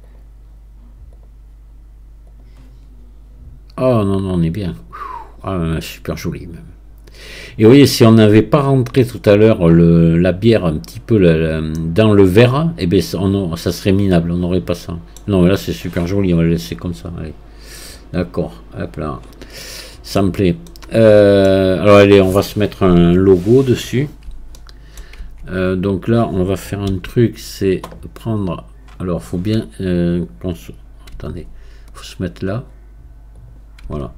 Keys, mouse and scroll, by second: 13.9-16.4 middle drag, 16.4-18.0 scroll down 1, 18.0-19.6 drag, 19.6 middle click, 20.2-20.7 scroll down 1, 20.7-23.0 middle drag, 23.0 KP_1, 23.9-24.6 scroll up 1, 24.6 shift+middle click, 25.2 Tab, 32.3-33.4 scroll down 6, 33.4 click.